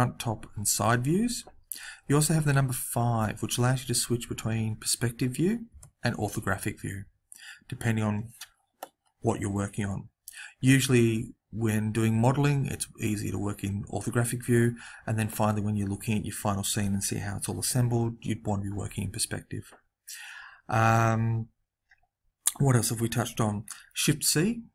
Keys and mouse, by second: 4.2 KP_5, 5.7 KP_5.